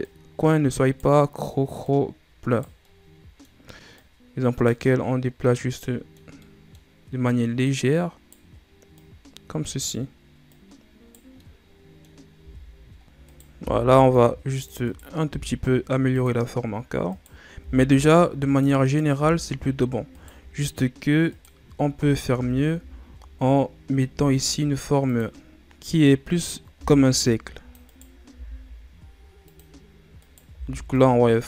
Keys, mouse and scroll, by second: 0.0 right click, 1.8 right click, 2.8-3.9 middle drag, 3.9 right click, 4.8-6.8 middle drag, 6.8-7.6 scroll up 1, 7.6 right click, 8.9 right click, 10.4 right click, 11.3 scroll up 1, 11.3-12.3 middle drag, 12.3 Tab, 12.6-13.2 scroll down 4, 13.2 right click, 13.5 c, 15.2 g, 17.0 right click, 17.6 c, 19.2 f, 20.1 right click, 21.2 right click, 21.9 ctrl+z, 22.3 ctrl+z, 23.0-24.1 scroll down 2, 24.1 g, 26.6 right click, 26.7 c, 28.3 g, 30.2 right click, 30.5 c.